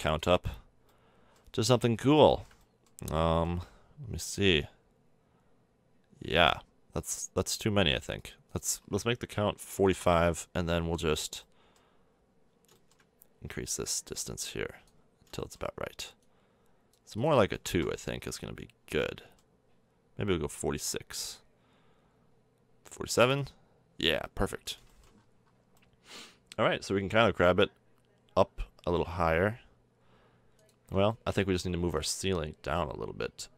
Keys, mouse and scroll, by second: 0.5-1.2 middle drag, 4.3-6.2 drag, 8.5-10.4 drag, 10.7-11.2 middle drag, 11.3-11.7 middle drag, 12.0 middle click, 13.6-15.1 middle drag, 15.1-20.5 drag, 20.5 middle click, 20.9-22.4 drag, 23.3 click, 24.9-25.5 middle drag, 25.8 middle click, 26.0-27.7 middle drag, 27.1 g, 31.1 middle click, 31.5 Tab, 31.8 Tab.